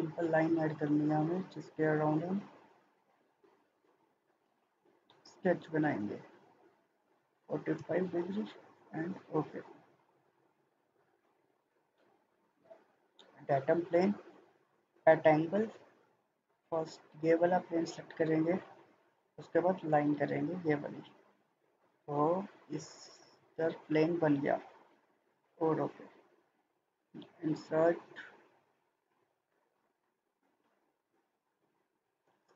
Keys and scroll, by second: 4.9 Escape, 7.1 typing, 7.7 Return.